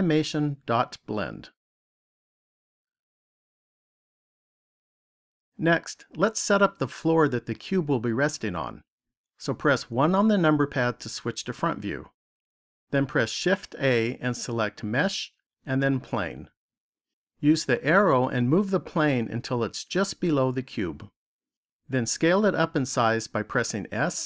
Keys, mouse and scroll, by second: 5.3 click, 9.8 KP_1, 13.1 shift+a, 18.5 click, 23.8 s.